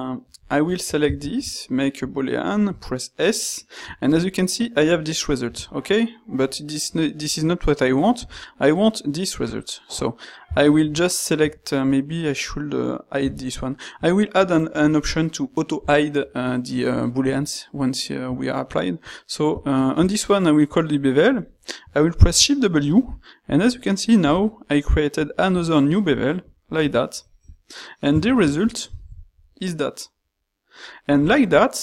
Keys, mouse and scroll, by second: 0.7-2.3 shift+drag, 1.2 ctrl+shift+q, 10.8 ctrl+shift+q, 13.2 h, 19.8 ctrl+shift+q, 28.2 shift+z.